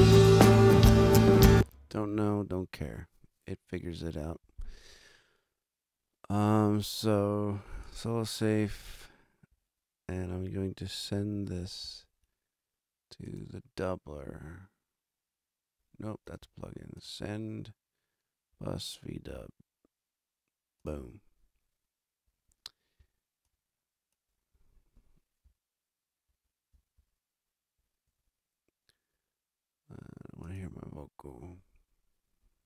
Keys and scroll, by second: 1.3 space, 26.2 super+=, 28.0 alt+a.